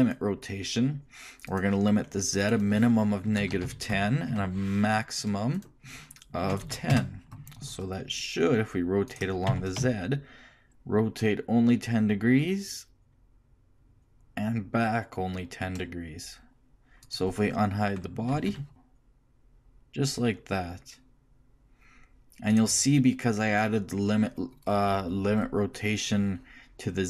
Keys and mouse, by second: 4.3 Tab, 5.5-7.5 drag, 9.1-12.7 drag, 9.5 r, 18.3 alt+h, 18.7 r.